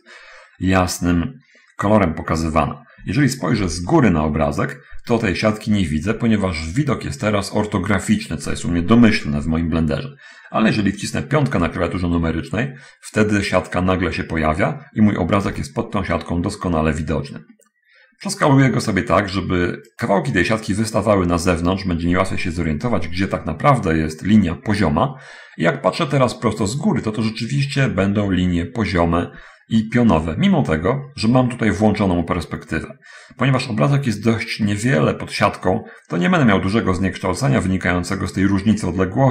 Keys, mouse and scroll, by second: 4.0 7, 11.9 5, 15.8 s, 20.3 click, 34.7-37.7 middle drag, 38.6-39.3 drag.